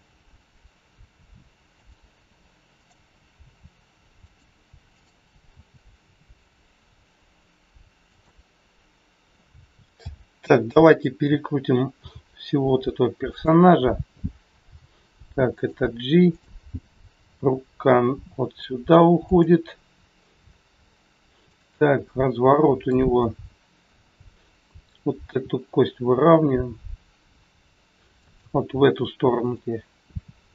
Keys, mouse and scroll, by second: 2.7 click, 3.4 r, 4.8 click, 5.5 r, 10.0 a, 13.2 r, 15.5 g, 16.2 click, 17.1 g, 21.3 click, 22.1 middle click, 23.1 scroll up 1, 23.2 middle click, 25.0 click, 25.2 r, 29.4 click, 30.1 r.